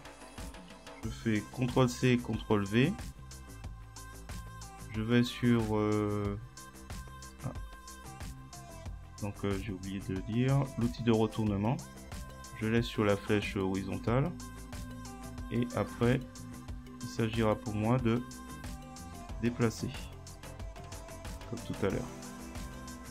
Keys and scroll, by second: 1.6 ctrl+c, 2.1 ctrl+v, 18.8 Right.